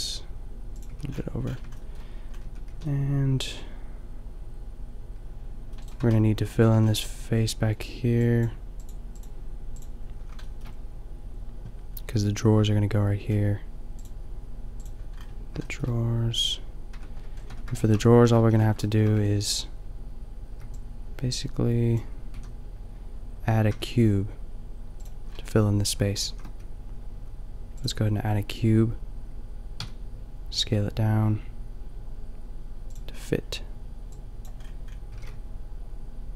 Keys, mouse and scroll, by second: 0.8 a, 2.4 Tab, 2.7 a, 6.0 Tab, 6.6 a, 13.1 middle click, 14.8 click, 15.7-16.9 shift+middle drag, 16.9 Tab, 17.4 Tab, 18.2 a, 18.4 a, 20.5 b, 22.4 a, 23.6 Tab, 25.3 middle drag, 26.3 shift+a, 29.7 s, 33.2-34.4 middle drag, 34.5-36.3 middle drag, 35.0 g.